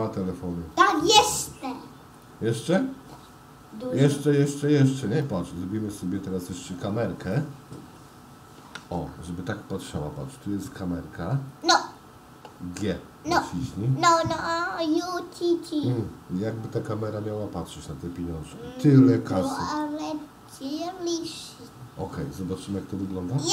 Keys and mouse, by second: 2.3 click, 2.8 g, 5.4-6.7 middle drag, 7.5 middle click, 8.9 ctrl+alt+KP_0, 11.6 click, 15.2 g.